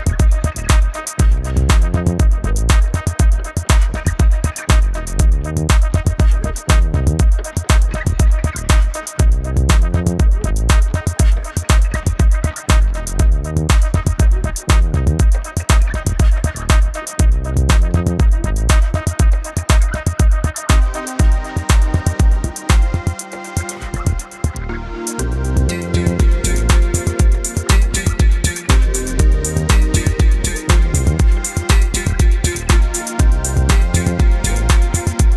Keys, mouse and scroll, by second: 0.0 Right, 0.5 click, 1.2 b, 2.2 click, 3.1 ctrl+z, 3.4 click, 4.5 space, 4.7 click, 4.9 space, 5.1 z, 5.2 click, 5.8 ctrl+z, 6.1 click, 6.9-10.7 typing, 7.0 click, 8.8 click, 9.8 click, 10.5 click, 10.8 click, 13.0 click, 14.8 right click, 22.5 v, 22.9 click, 30.0 click, 30.8 right click, 31.6 click.